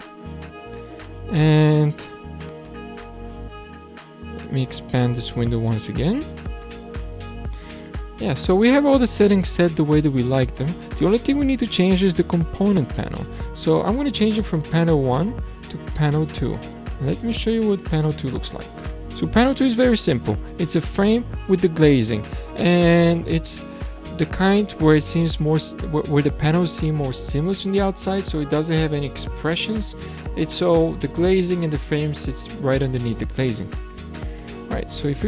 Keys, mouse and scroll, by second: 4.4-5.8 drag, 5.8-7.2 scroll down 8, 7.2-10.3 scroll down 3, 15.2-16.6 scroll up 2, 16.6 click, 17.7 click, 19.1-21.5 middle drag, 21.5-22.1 scroll up 2, 22.1-22.6 scroll down 3, 34.8-35.2 scroll down 6.